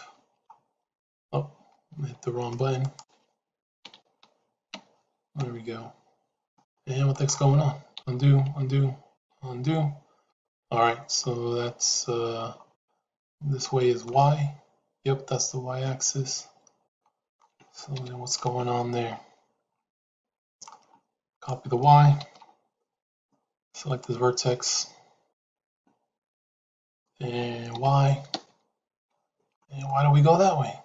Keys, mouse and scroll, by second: 1.9 ctrl+z, 2.8-6.5 drag, 7.9 ctrl+z, 8.4 ctrl+z, 9.1 ctrl+z, 14.0-17.2 middle drag, 17.9 KP_Decimal, 20.0 middle click, 21.2-23.1 drag, 23.8 click, 25.2 click, 26.7-29.5 drag, 29.8-30.8 middle drag.